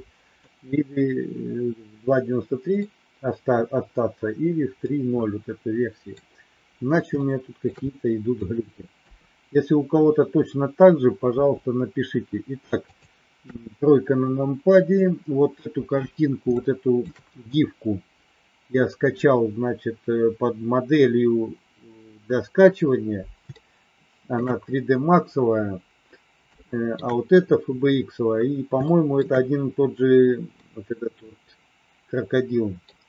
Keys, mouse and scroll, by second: 0.4-2.7 middle drag, 4.8-6.1 middle drag, 4.8 scroll up 1, 7.1 shift+middle click, 7.8 middle click, 9.0 KP_3, 11.3 r, 13.3 KP_1, 16.6 shift+middle click, 23.6 shift+middle click, 26.5 shift+middle click, 28.8 shift+middle click, 30.6-32.8 middle drag.